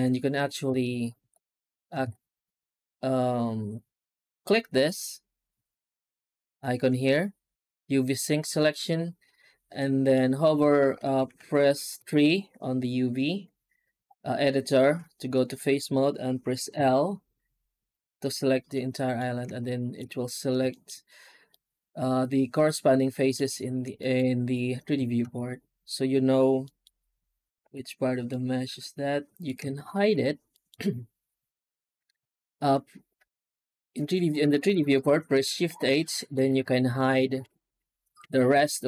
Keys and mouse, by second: 0.5 a, 1.0 alt+a, 1.9 alt+a, 4.7 click, 9.7 middle click, 10.8 1, 11.2 2, 11.8 3, 16.6 l, 18.6 middle click, 19.5 shift+middle click, 20.6 alt+middle click, 21.4-23.2 middle drag, 23.8 shift+middle click, 25.1 alt+a, 26.6 middle click, 27.5 l, 28.1-29.3 middle drag, 29.9 shift+h, 30.4 shift+middle click, 32.0 ctrl+z, 35.5 shift+h, 37.3-38.8 middle drag.